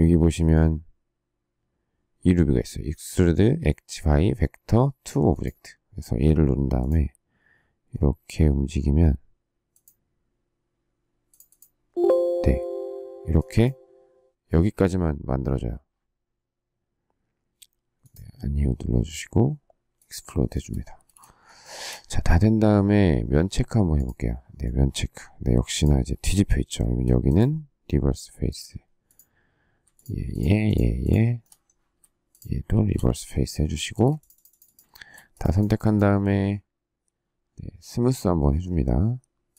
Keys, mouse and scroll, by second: 21.0 space, 21.5 shift+scroll, 21.5 shift+middle click, 29.9 shift+click, 30.3 shift+click, 30.9 shift+click, 31.0 shift+double click, 31.3 shift+middle click, 32.2 shift+click, 32.7 shift+r, 33.8 space, 34.8 shift+middle click.